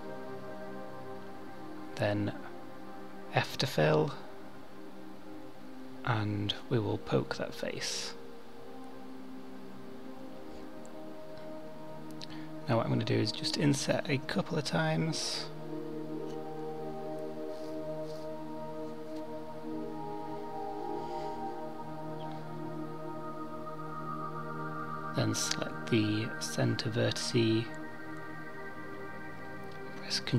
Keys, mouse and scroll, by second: 0.8 middle click, 4.7 f, 6.5 click, 11.9 i, 16.2 i, 25.3 1, 27.4 click, 29.5 ctrl+b.